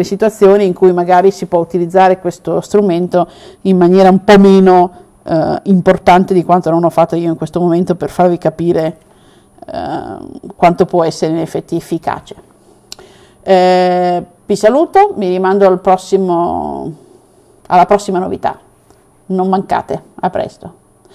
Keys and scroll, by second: 7.9 w.